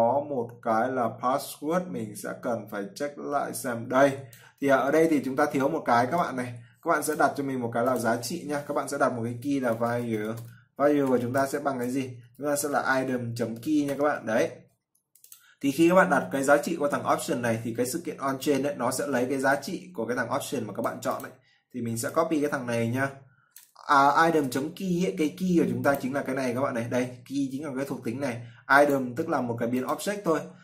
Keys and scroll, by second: 24.1 ctrl+c.